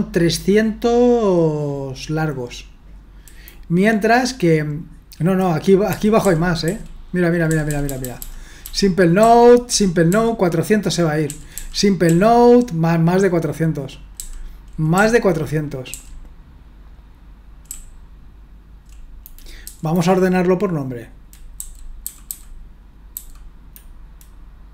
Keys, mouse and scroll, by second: 5.9 Down, 6.2-9.2 typing, 8.6 Down, 9.2 Up, 9.7 Down, 10.1 Down, 11.3 Down, 11.5 Down, 12.1 Up, 14.2 Down, 14.9 Up, 15.9 Down, 17.7-18.9 Up, 18.4 Up, 19.6 Down, 21.6 Left, 22.0 Left, 22.2 Left, 23.1 Left.